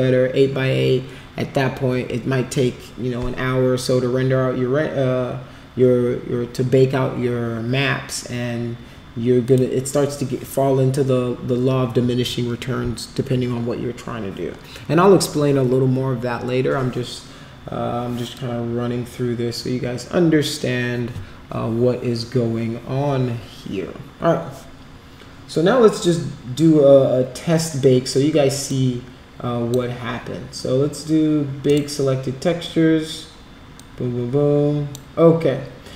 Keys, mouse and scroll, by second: 9.4 click, 28.6-29.7 drag, 31.6 click, 33.8-34.9 drag.